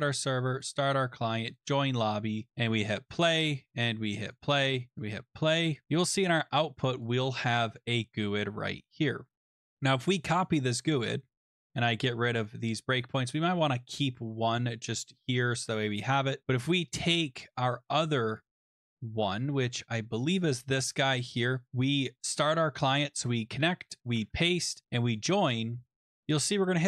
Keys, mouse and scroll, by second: 0.6 click, 1.6 click, 2.7 click, 4.3 click, 5.3 click, 5.8 click, 6.9 click, 7.0 click, 9.4 ctrl+c, 10.4 click, 10.7-11.5 scroll down 5, 11.7 click, 11.7-12.5 scroll, 12.5 click, 12.7-13.7 scroll, 15.0 click, 15.9 click, 16.7 click, 18.5 click, 20.6 click, 21.6 click, 21.7 click, 22.3 click, 24.0 click, 24.2 ctrl+v, 25.2 click, 26.1 click.